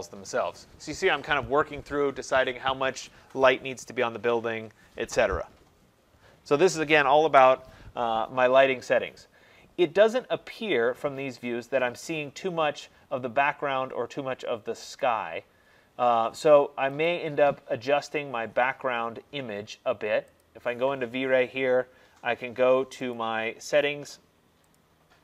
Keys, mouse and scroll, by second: 15.1 click, 17.1 click, 20.5 click, 23.2 click, 24.8 click.